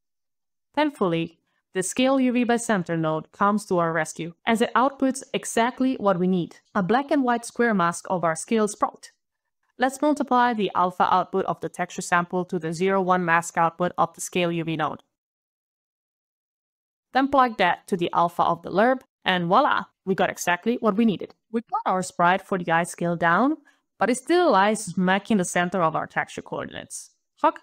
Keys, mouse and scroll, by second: 9.6 alt+click, 10.1 alt+click, 10.3 alt+click, 10.3 alt+scroll down 2, 11.4 alt+click, 12.9 alt+click, 14.3 alt+click, 15.7 alt+click, 16.0 alt+c, 16.2 alt+shift+a, 16.2 alt+d, 16.2 alt+shift+space, 16.3 alt+shift+s, 16.3 alt+q, 16.3 alt+u, 16.3 alt+BackSpace, 16.3 alt+r, 16.3 alt+shift+space, 16.4 alt+k, 16.4 alt+t, 16.4 alt+o, 16.5 alt+e, 16.5 alt+Return, 16.6 alt+click, 16.6 alt+click, 16.7 alt+click, 20.9 alt+click.